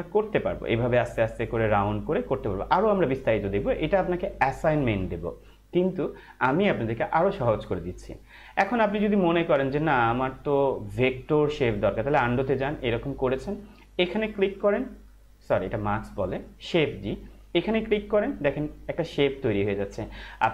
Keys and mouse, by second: 0.0 Left, 6.7 click, 12.1 ctrl+alt+z, 14.6 click, 16.0 ctrl+z, 17.8 click.